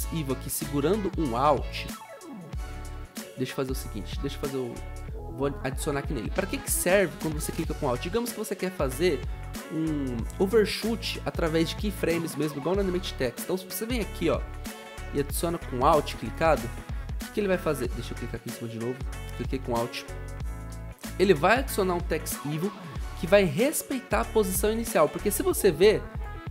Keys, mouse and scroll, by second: 2.8 ctrl+z, 17.5 ctrl+z.